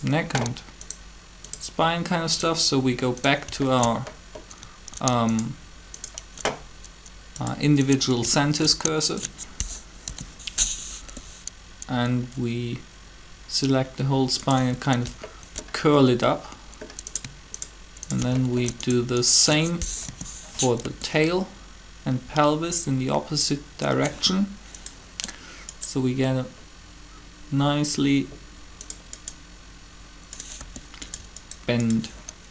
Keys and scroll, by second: 10.0 shift+7, 11.0 r, 20.0 shift+7, 20.8 r, 30.5 r.